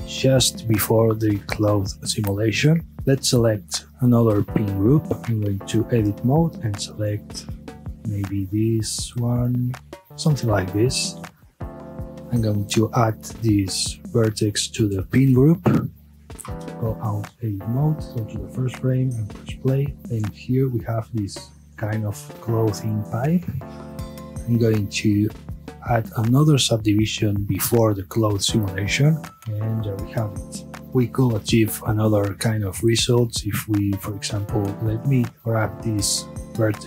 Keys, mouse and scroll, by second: 3.0 space, 5.3 Tab, 6.0 scroll up 1, 6.2-7.1 middle drag, 7.1 alt+click, 7.5 scroll down 1, 7.9-8.8 middle drag, 8.8 scroll up 1, 9.0-9.6 middle drag, 9.6-10.0 scroll up 1, 10.0-11.1 middle drag, 12.2 click, 12.9 scroll up 1, 15.3-16.6 drag, 16.6 Tab, 17.7-18.5 drag, 18.5-18.9 middle drag, 18.9 space, 35.3 space, 35.4 alt+click.